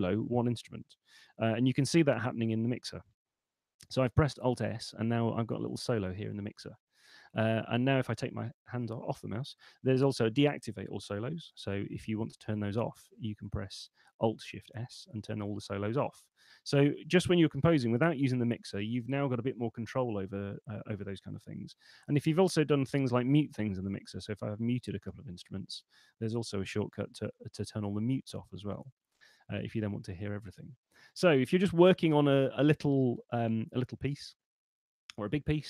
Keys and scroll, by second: 1.4 F3, 11.9 alt+shift+s, 17.9 F3, 21.7 F3, 26.9 alt+shift+m, 29.2 F3.